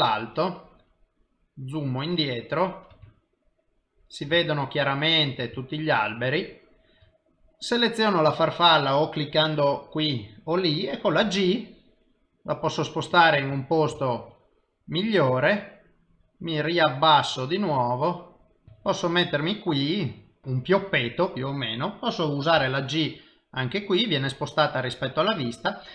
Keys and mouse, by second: 0.2 ctrl+middle click, 1.1 ctrl+middle click, 3.4 ctrl+middle click, 3.6 shift+middle click, 4.8 ctrl+middle click, 5.9 shift+middle click, 8.0 click, 11.6 g, 14.4 shift+middle click, 16.0 middle click, 19.0 shift+middle click, 20.2 middle click, 23.7 c.